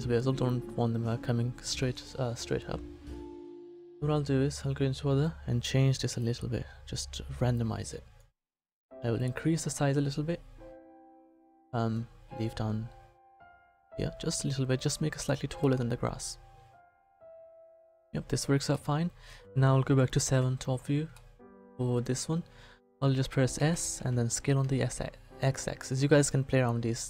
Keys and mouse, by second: 5.2 click, 15.6 middle click, 17.4 middle click, 20.3 KP_7, 23.6 s.